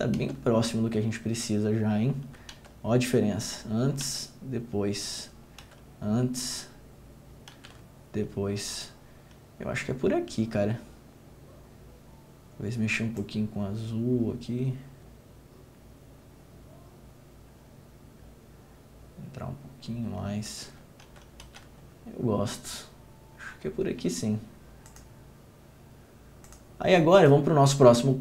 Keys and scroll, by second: 0.3 ctrl+d, 2.7 ctrl+d, 4.2 ctrl+d, 5.8 ctrl+d, 7.7 ctrl+d, 21.2 ctrl+d, 21.6 ctrl+d.